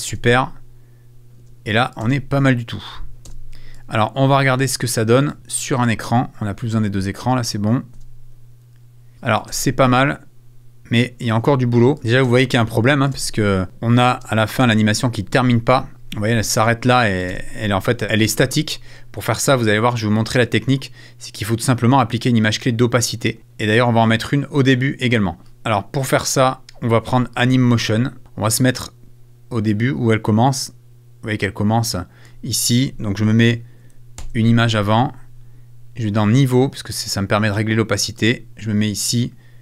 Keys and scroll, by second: 1.4 space, 3.2 space, 7.9 space, 9.1 space, 11.3 space, 12.2 space, 17.3 space, 25.4 space, 33.9 Right.